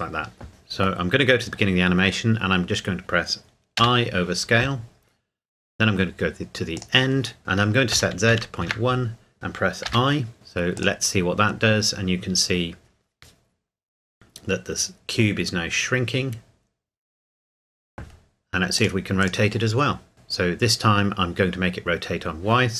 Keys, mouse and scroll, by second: 0.5 ctrl+z, 6.7 click, 7.9 KP_Decimal, 8.3 KP_1, 8.6 KP_Enter, 10.7 click, 18.7 click.